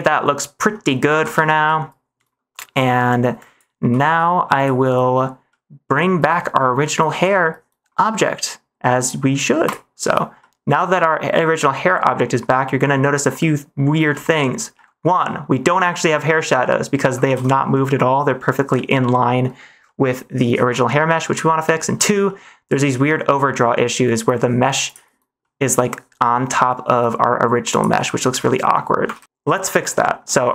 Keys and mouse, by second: 1.1 ctrl+s, 1.3 shift+middle click, 2.4 middle click, 3.3 click, 4.0 g, 5.4 middle click, 7.1 ctrl+s, 10.3-12.1 middle drag, 12.5 shift+middle drag, 14.2 shift+middle drag, 14.6 middle click, 15.5 middle click, 16.5 middle click, 17.2 ctrl+s, 17.7 middle click, 18.9 middle click, 19.8 middle click, 20.7 middle click, 21.7 shift+middle drag, 22.2-22.6 middle drag, 24.8 click, 25.3 middle click, 27.6 click, 28.3-28.9 middle drag, 29.1 ctrl+s, 29.8 shift+middle drag.